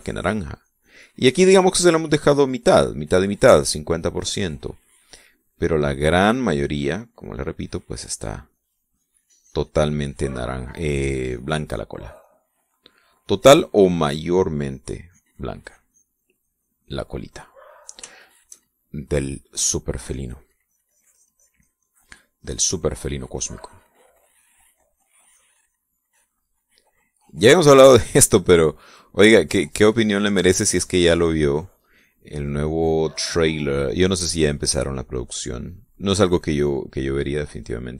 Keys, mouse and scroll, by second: 0.6-2.3 drag, 1.9 middle click, 2.5 click, 4.3-5.5 drag, 5.5-7.3 middle drag, 7.5-8.8 drag, 8.8 middle click, 9.3-10.8 drag, 10.9-13.2 drag, 13.2-14.3 middle drag, 15.0-16.4 drag, 16.5-17.9 drag, 18.0 click, 18.1-19.9 middle drag, 20.9-27.9 drag, 28.1-29.7 drag, 30.1-31.1 drag, 31.2 middle click, 31.9-34.4 drag, 34.5-35.9 drag, 36.0 click, 36.5 middle click, 37.1 middle click.